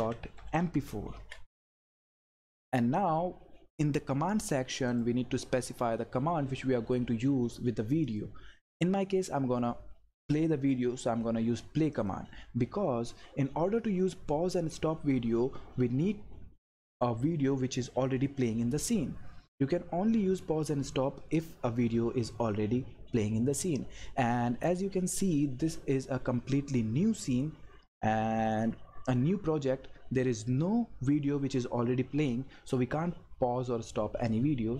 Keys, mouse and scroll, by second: 0.0-1.1 typing, 4.9 click, 8.0 click, 11.9 click, 26.0 click.